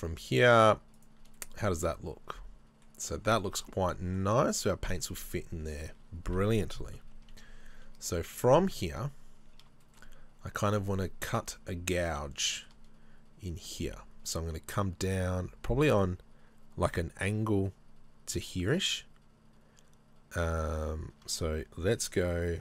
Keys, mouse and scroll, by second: 1.4 shift+click, 1.4 middle click, 3.1 middle click, 3.1-3.4 scroll down 1, 3.4 middle click, 5.8 scroll down 1, 7.0 KP_3, 8.8-9.5 scroll up 1, 9.8 scroll up 1, 9.9 shift+middle click, 11.3 z, 12.5 shift+middle click.